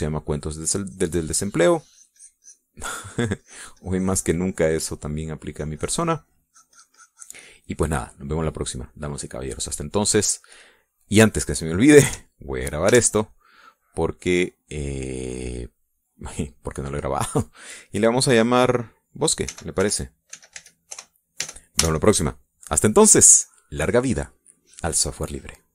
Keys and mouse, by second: 3.5-4.6 drag, 4.7-7.0 drag, 7.3-11.0 drag, 11.1 middle click, 11.3-12.5 drag, 14.7 ctrl+s, 16.3 click, 18.6 click, 21.3-23.3 typing, 23.7 Return.